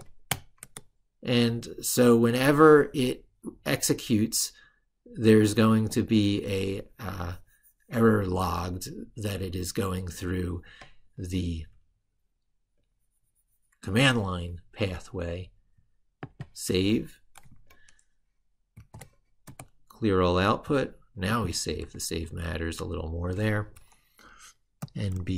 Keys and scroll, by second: 18.5 ctrl+shift+r, 21.7 ctrl+super+Right.